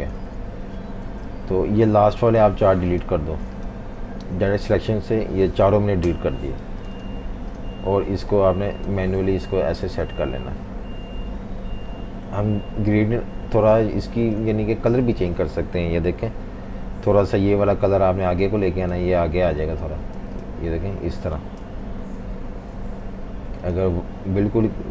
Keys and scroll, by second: 0.1 super+z, 1.0 super+g, 3.9 a, 5.8 Delete, 6.6 v, 9.3 Left, 9.5 Left, 9.7 Left, 9.8 Left, 14.1-15.0 typing, 20.2 v, 21.6 super+-, 21.8 super+-, 22.0 super+-.